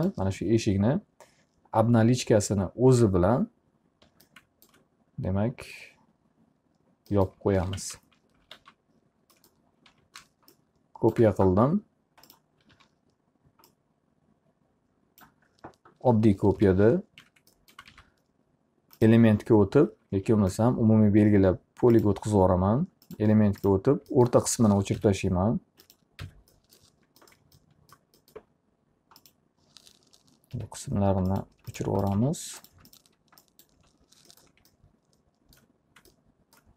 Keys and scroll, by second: 8.8-10.5 typing, 13.3 e, 17.1 p, 17.8 z, 18.5 alt+a, 20.7 ctrl+a, 25.1 Delete, 30.6 Delete.